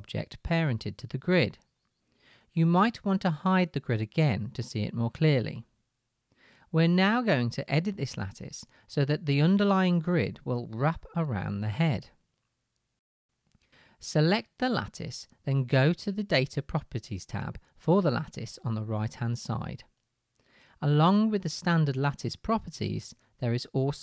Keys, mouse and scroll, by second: 13.7 click.